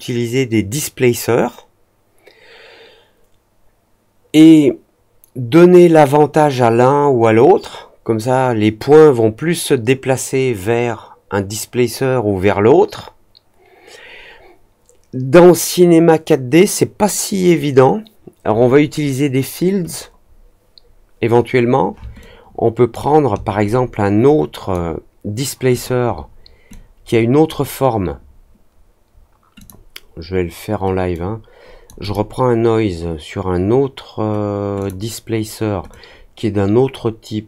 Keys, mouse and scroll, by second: 22.1 ctrl+click, 23.6-24.7 drag, 25.7 click, 26.6-27.4 drag, 29.5 click, 31.1-31.8 drag, 31.9 click, 34.7 click, 35.8-37.4 drag.